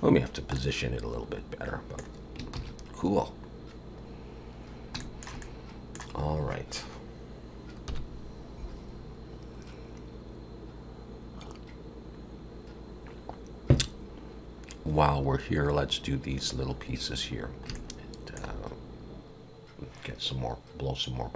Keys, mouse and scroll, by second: 0.0 scroll down 1, 0.5 middle click, 2.5 ctrl+s, 4.3 scroll down 2, 5.0 shift+middle click, 5.4 middle click, 7.9 KP_1, 16.8 scroll up 2, 17.3 scroll down 1, 17.8 shift+middle click.